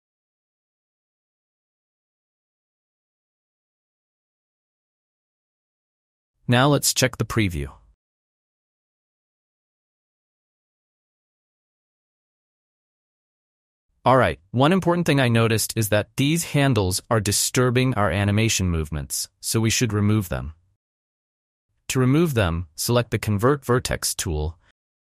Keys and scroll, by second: 9.3 space, 12.7 space, 15.4 space, 21.4 ctrl+z.